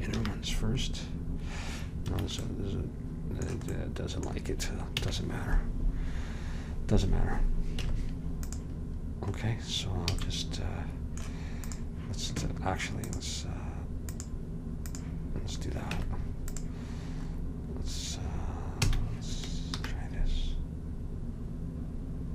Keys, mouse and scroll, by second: 0.2 ctrl+b, 2.7 middle click, 5.0 a, 7.9 Tab, 10.2 a, 11.7 middle click, 16.0 Tab, 18.9 a, 19.8 ctrl+b.